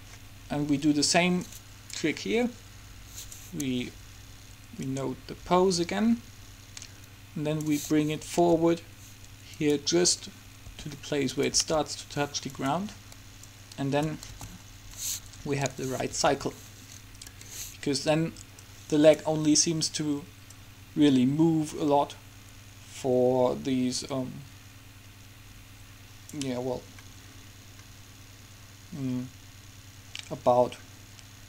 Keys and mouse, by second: 1.6-6.9 drag, 8.4 g, 10.8 r, 11.7 g, 13.6-15.4 drag, 14.4 alt+a, 15.8 Escape, 16.4 alt+a, 17.4 Escape, 20.9-22.4 drag, 27.4-31.4 middle drag.